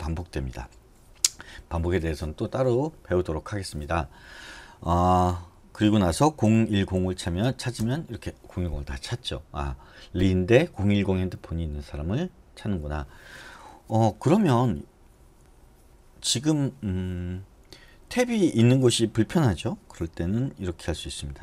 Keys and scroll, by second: 6.4-7.7 typing, 8.0 Return.